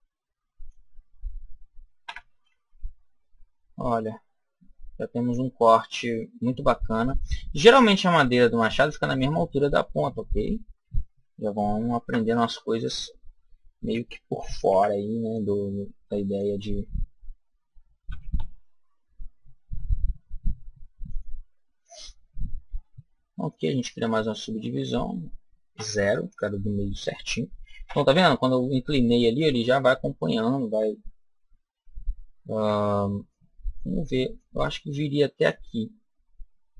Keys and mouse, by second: 1.9 Tab, 3.1-5.0 middle drag, 9.6-11.9 middle drag, 11.9 Tab, 14.6 b, 17.9 s, 21.1 click, 22.6 ctrl+r, 26.2 click, 27.8 a, 32.4 b, 34.2 click.